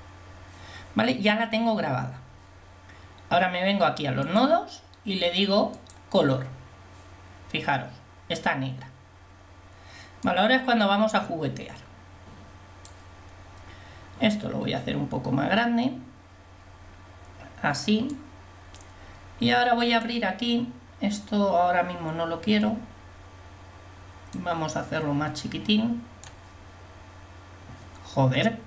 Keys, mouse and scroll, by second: 13.6-14.1 scroll up 1, 18.1 click, 18.6 click, 19.0 click, 19.6 click, 24.3-26.4 drag.